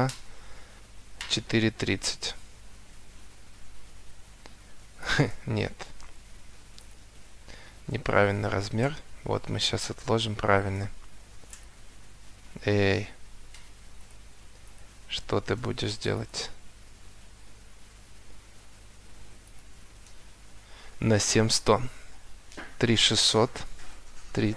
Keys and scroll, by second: 4.0 Escape, 12.4 Escape.